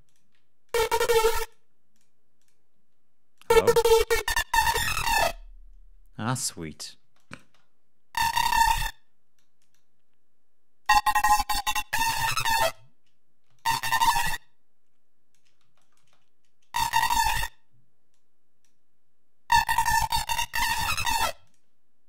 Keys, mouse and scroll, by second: 0.5 click, 1.3 click, 1.8 click, 2.3 click, 3.2 click, 3.9 2, 4.6 Return, 6.2 click, 6.9 space, 7.0 click, 8.1 click, 9.2-10.9 drag, 11.6-12.8 shift+drag, 13.4-15.4 shift+drag, 15.5 shift+space, 15.7 shift+click, 18.0 click, 19.8 click, 20.3 shift+click, 21.3-22.0 shift+drag.